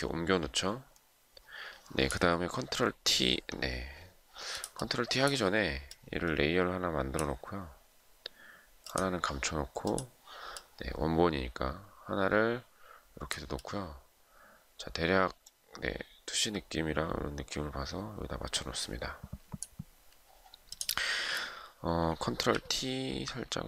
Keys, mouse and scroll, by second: 22.1 ctrl+t, 23.3 shift+click.